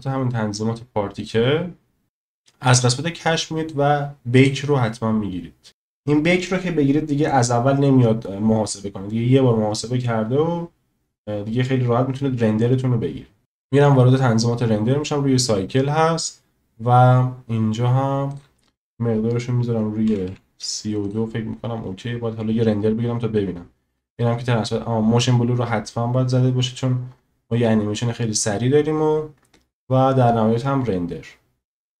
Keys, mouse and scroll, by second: 4.3-13.4 drag, 18.3-21.1 drag.